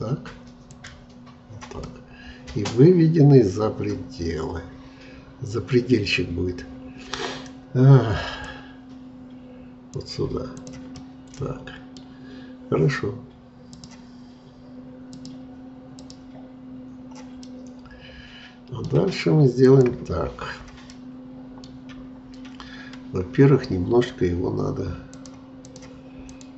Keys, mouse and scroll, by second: 1.8-4.2 middle drag, 4.2-4.8 scroll down 1, 4.8-6.4 scroll down 1, 6.4-8.2 scroll down 1, 8.5-10.9 drag, 10.9-13.7 middle drag, 13.7-17.4 drag, 17.4-19.6 middle drag, 19.6-20.9 drag, 20.9-23.9 middle drag, 25.1-26.5 drag.